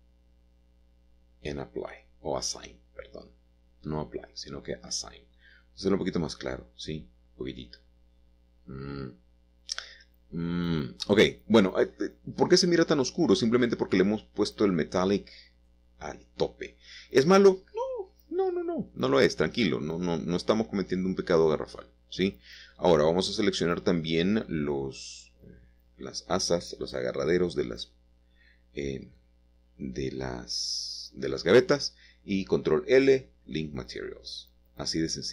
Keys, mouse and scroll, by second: 1.8 click, 5.1 click, 6.0-7.6 scroll up 1, 7.6-9.2 scroll up 2, 9.9 Tab, 10.5 Tab, 11.4-11.9 scroll down 2, 11.9-12.3 scroll up 1, 12.3 Tab, 12.6 click, 14.4 space, 16.0-17.2 shift+drag, 19.2 Escape, 19.2 typing, 19.3 Escape, 21.1 i, 22.4 shift+click, 22.8 shift+click, 23.0 click, 25.0-26.5 drag, 27.3 Tab, 27.7-30.0 scroll down 2, 29.4-33.1 middle drag.